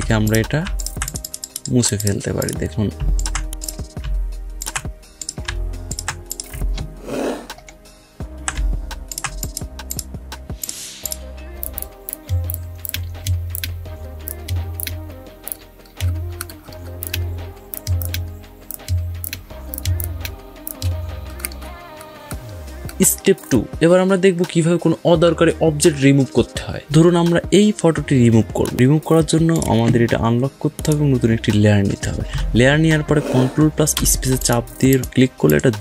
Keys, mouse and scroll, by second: 0.7 alt+click, 3.1 alt+click, 6.5 alt+scroll down 1, 7.4 alt+scroll up 1, 9.0 alt+click, 12.4 alt+click, 14.7 alt+click, 15.9 alt+scroll down 1, 16.3 alt+scroll up 1, 16.9 alt+click, 19.2 alt+click, 21.3 alt+scroll down 1, 22.2 alt+scroll up 1, 22.6 alt+scroll down 1, 22.8 alt+scroll up 1, 29.4 click, 30.4 typing, 33.8 ctrl+space, 34.2 ctrl+click, 34.3 ctrl+space.